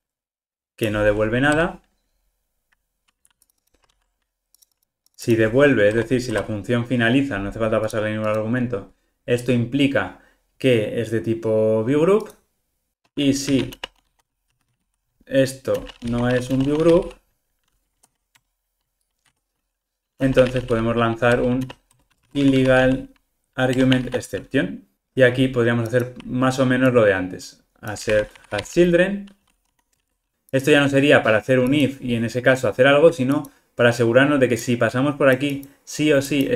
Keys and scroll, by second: 3.9 super+c, 4.8 alt+super+[, 18.4 Return, 23.8 Return.